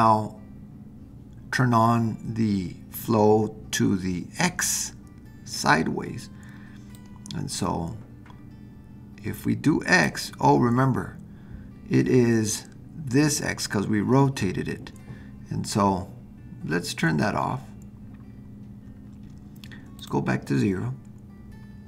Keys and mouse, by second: 6.9-10.1 drag, 20.0-21.8 drag.